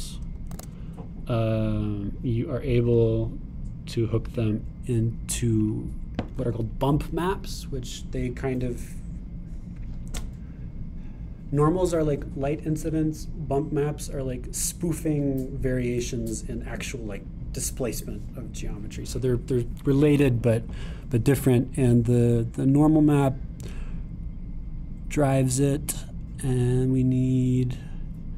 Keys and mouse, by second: 0.2 middle click, 1.5 shift+a, 6.5 click, 23.7 click, 26.7 click, 27.6 click.